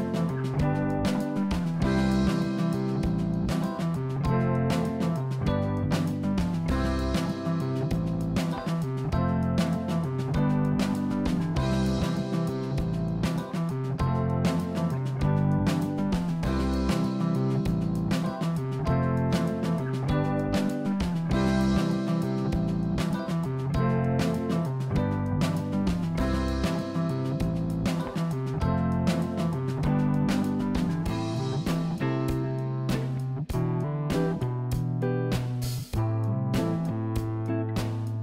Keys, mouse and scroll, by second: 0.2-1.8 scroll up 1, 2.5 Tab, 2.9 click, 3.3 click, 8.4 g, 14.2 s, 18.1 click, 18.7-20.3 middle drag, 23.7-24.3 scroll down 4, 24.3-25.8 middle drag, 25.8-26.4 scroll up 2, 26.4-26.7 scroll down 2, 26.7-27.2 scroll up 1, 27.2-28.4 middle drag, 28.4 scroll down 2, 28.7 middle click, 29.5-29.9 scroll down 1, 29.9-31.5 middle drag, 36.3-37.4 scroll up 5, 37.4 click, 37.8 middle click.